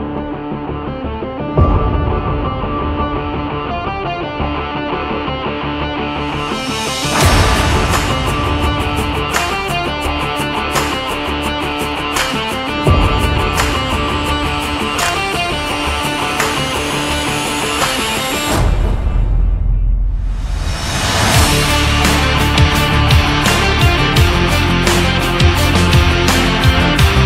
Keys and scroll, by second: 0.5 ctrl+z.